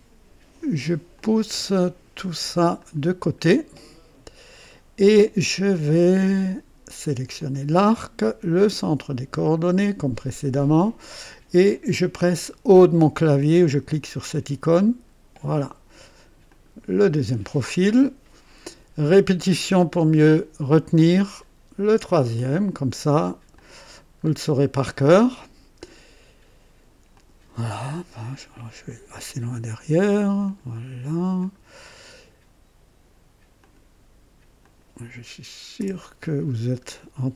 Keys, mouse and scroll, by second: 1.1-2.2 drag, 2.8-3.6 drag, 4.2 typing, 7.3 click, 9.4 click, 14.8 typing, 16.4 click, 20.6 click, 22.3 click, 23.5 click, 24.2 scroll up 1, 24.8-25.4 right drag, 25.6 scroll up 1, 27.1 click, 28.8 click, 30.4 click, 31.4 click, 31.8 right click, 33.5 click, 34.6 click, 35.8 h, 36.5 scroll up 1.